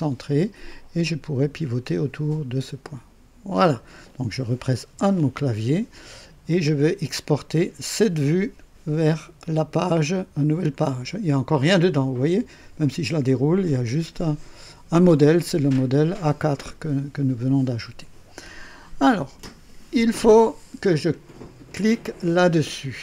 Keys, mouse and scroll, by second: 0.7-3.8 drag, 4.8 KP_1, 12.8 click.